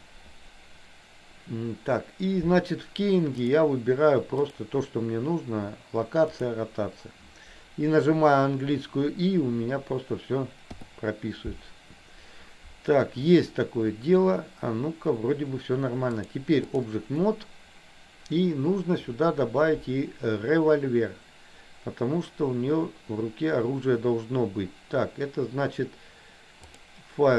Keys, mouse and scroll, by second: 3.5-6.8 drag, 10.8 i, 16.3 click, 26.8-27.3 drag.